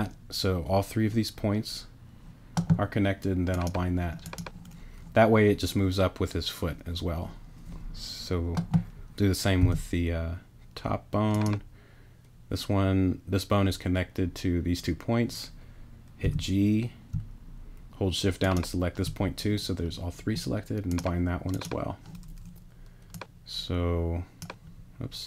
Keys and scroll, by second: 9.6 b, 16.2 g, 17.1 shift+g.